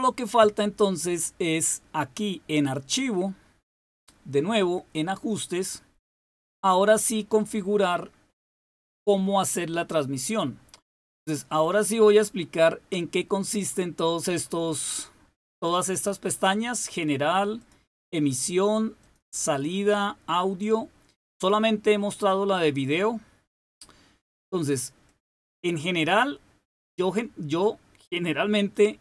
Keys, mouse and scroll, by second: 3.6 click, 5.4 click, 17.5 click, 18.9 click, 19.8 click, 22.1 click, 25.0 click, 28.7-29.0 drag.